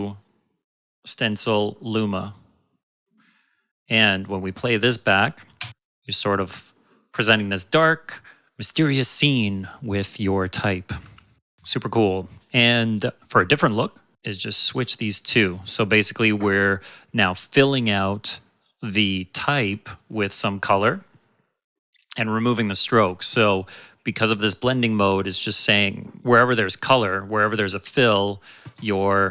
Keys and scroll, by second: 5.5 space, 13.2 space.